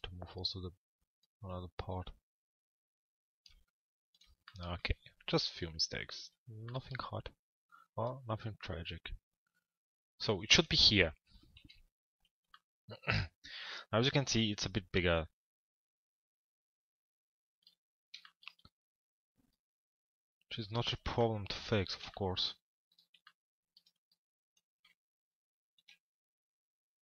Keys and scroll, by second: 11.2 p.